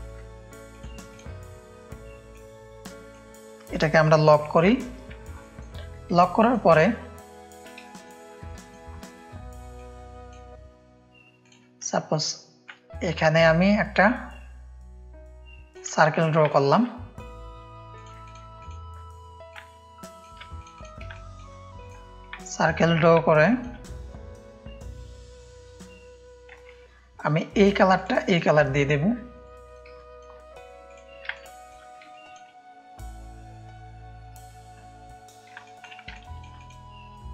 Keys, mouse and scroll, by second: 0.7-2.1 drag, 2.3 click, 4.5 ctrl+2, 5.2 space, 5.4 click, 6.1 ctrl+space, 6.2 ctrl+click, 7.2 click, 7.2 space, 7.8 click, 7.9 space, 8.4 click, 8.4 space, 9.7 click, 12.6-15.7 alt+shift+drag, 16.4 click, 16.4 space, 17.9 click, 18.2 click, 18.5 click, 19.5 alt+shift+click, 20.5 click, 21.1 click, 21.1 space, 21.7 click, 22.3 click, 22.3 space, 23.2 click, 23.2 space, 26.5 [, 27.9 click, 29.3 click, 29.9 click, 30.0 space, 30.8 click, 31.4 ctrl+space, 31.4 ctrl+click, 32.1 click, 32.1 space, 35.6 click, 35.6 space, 36.1 ctrl+space, 36.1 ctrl+click, 36.5 drag.